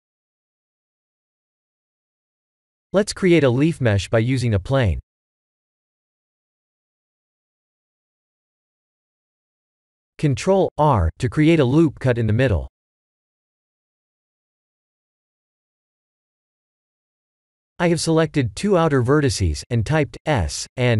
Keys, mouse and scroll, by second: 1.1 click, 1.7 click, 2.5 h, 3.0 shift+a, 8.7 KP_7, 9.8 Tab, 10.7 ctrl+r, 13.8 Tab, 14.4 Tab, 15.0 click, 15.8 shift+click, 16.7 s.